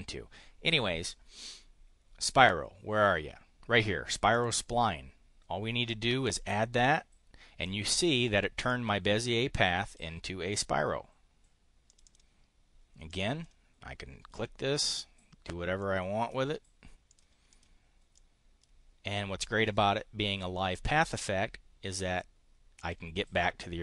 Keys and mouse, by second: 4.3 click, 6.2 click, 8.6-10.0 drag, 11.8 click, 13.0 click, 14.3 click, 15.7 click, 17.0 click, 17.5 click, 18.1 click, 22.7 click.